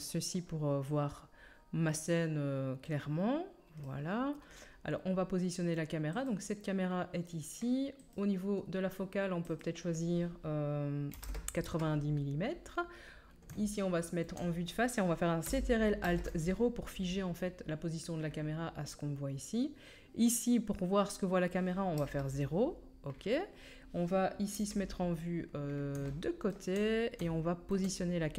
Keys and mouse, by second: 3.0 middle drag, 6.2-8.0 drag, 8.1-9.5 drag, 16.0 ctrl+alt+KP_0, 21.9 middle click, 22.0 KP_0, 22.2 middle click, 23.5-24.6 middle drag, 24.5 KP_3, 24.7 middle click, 26.5-28.3 shift+middle drag.